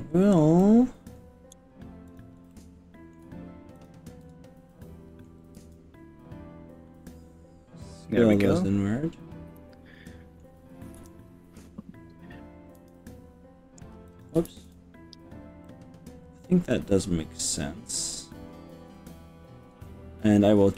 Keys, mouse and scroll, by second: 0.6 middle click, 2.1 click, 2.5 middle click, 3.8 shift+click, 4.2-5.3 middle drag, 5.6 s, 8.1 click, 8.3-10.4 middle drag, 10.9 KP_1, 12.9 s, 14.1 click, 14.5 ctrl+z, 15.6-19.6 middle drag, 19.6 click.